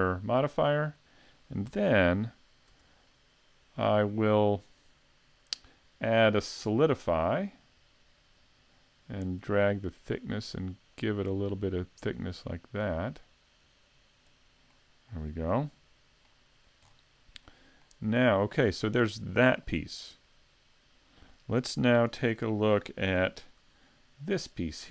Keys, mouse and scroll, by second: 0.4 shift+middle click, 0.4 scroll up 1, 1.0 middle click, 1.7 Tab, 2.7 Tab, 3.8 middle click, 6.3 click, 9.4 click, 14.7 middle click, 16.9-17.5 scroll down 1, 17.5 middle click, 17.5 scroll down 2, 18.7-19.3 scroll down 1, 19.3-20.1 scroll up 2, 22.1 a, 23.2 n.